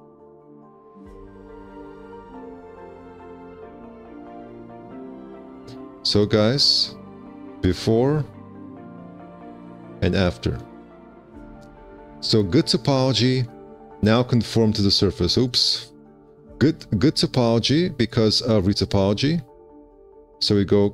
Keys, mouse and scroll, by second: 5.0 1, 5.2 q, 6.2 alt+q, 6.5 z.